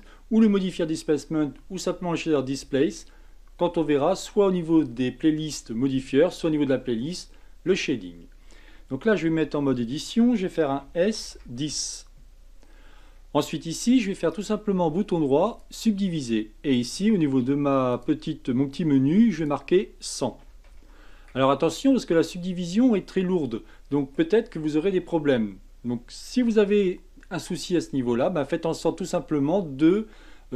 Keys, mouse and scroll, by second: 9.3 Tab, 10.9 s, 12.6-13.1 scroll down 8, 14.3-17.3 right drag, 17.9 drag, 19.3-20.8 drag, 20.8 KP_0, 22.9-26.0 middle drag.